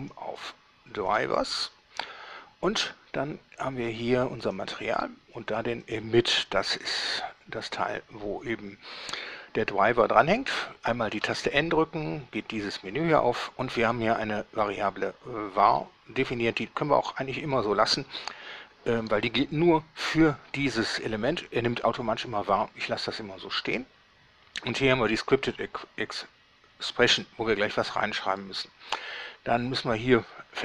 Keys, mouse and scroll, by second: 0.2 click, 1.4 click, 4.7 click, 6.0 click, 11.4 n.